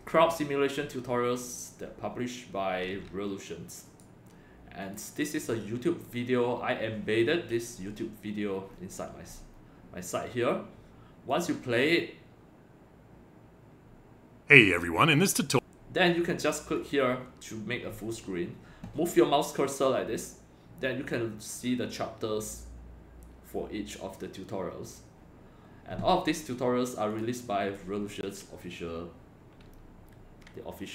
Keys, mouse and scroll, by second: 3.9 right click, 4.8 click, 7.8 scroll down 1, 8.8 scroll down 1, 9.3-9.7 scroll up 3, 11.3 click, 15.4 click, 16.7 click, 27.1 click.